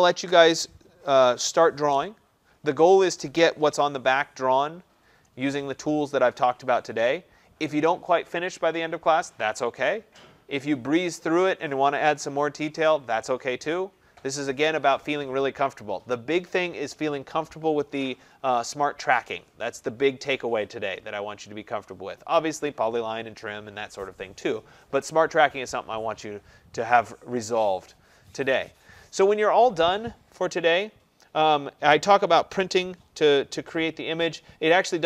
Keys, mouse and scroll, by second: 30.4-31.6 scroll, 31.6-35.0 scroll.